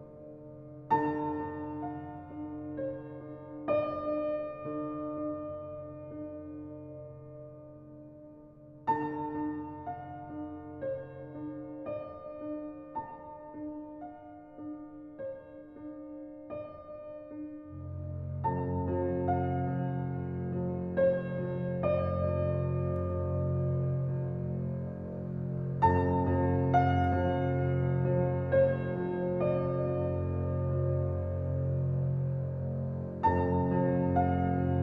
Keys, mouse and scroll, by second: 3.9 click, 4.7 click, 6.1 g, 7.6 click, 8.0 g, 9.2 click, 11.1 ctrl+j, 12.2 click, 13.2 g, 14.3-15.1 scroll down 1, 15.9-16.9 shift+middle drag, 16.9-18.0 scroll up 1, 18.0 click, 19.1 g, 21.6 click, 22.4 g, 23.6 click, 24.6 g, 30.1 drag, 31.8 g, 34.4-34.8 shift+middle drag.